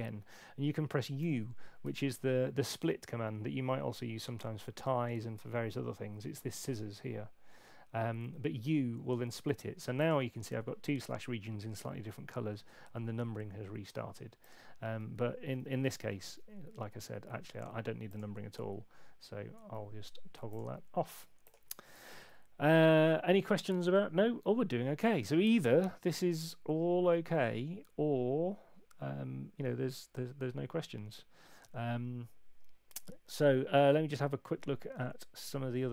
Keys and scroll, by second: 1.2 u, 15.5 super+z, 15.7 super+z, 16.3 super+z, 16.9 super+z, 22.0 super+8.